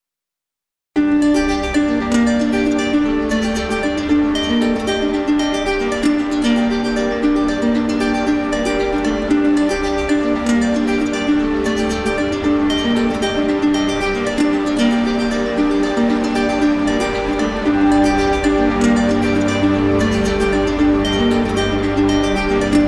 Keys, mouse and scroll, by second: 1.7 alt+click, 2.7 right click, 4.0 alt+right click, 4.5 right click, 5.0 z, 6.4 z, 8.0 right click, 9.1 right click, 9.5 right click, 11.2 click, 11.9 click, 12.5 click, 13.2 click, 13.6 click, 14.1 click, 14.6 click, 15.0 click, 15.2 click, 15.5 click, 15.7 click, 16.1 click, 16.5 click, 16.8 click, 17.3 click, 17.8 click, 18.1 click, 18.3 click, 19.1 click, 19.4 click, 19.6 click, 20.2 shift+click, 20.5-20.9 shift+click, 20.8 shift+click, 21.1 shift+click, 21.3 shift+click, 21.6 shift+click, 22.8 right click.